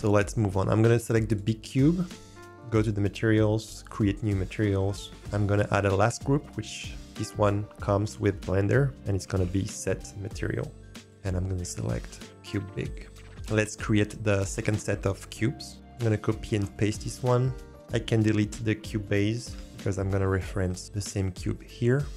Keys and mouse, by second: 0.1 click, 3.9 click, 5.1 shift+a, 11.0-12.1 drag, 12.8 click, 15.7 ctrl+z, 16.9 ctrl+v, 17.8-18.2 drag, 19.5 Delete.